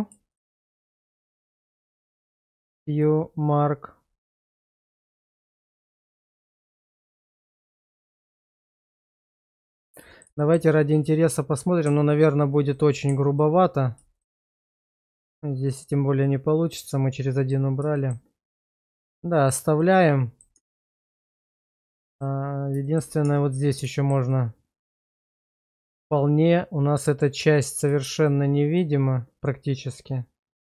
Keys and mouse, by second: 0.3 shift+click, 0.7 shift+click, 1.8 q, 4.4 middle click, 5.5-6.6 middle drag, 6.8 middle click, 7.4-9.3 middle drag, 9.6 shift+middle click, 10.0 middle click, 10.4 shift+middle click, 13.3 alt+click, 15.2-17.5 middle drag, 18.0 shift+middle click, 18.9 middle click, 19.8 middle click, 20.5 Tab, 21.2-22.2 middle drag, 22.8 shift+middle click, 23.2 Tab, 23.9 shift+middle click, 24.3 middle click, 25.2 shift+middle click, 29.5-30.7 middle drag.